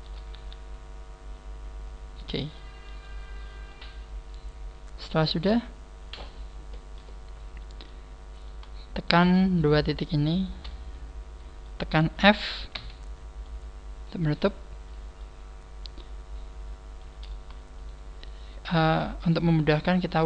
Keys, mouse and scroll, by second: 0.0 shift+right click, 0.3 g, 2.5 click, 2.5 middle click, 3.8 middle click, 8.4 right click, 8.9 shift+right click, 9.5 shift+right click, 10.3 shift+right click, 10.6 middle click, 12.7 f, 13.4 middle click, 17.0 middle click, 17.8 shift+right click, 18.2 shift+right click, 19.0 shift+right click, 19.3 shift+right click.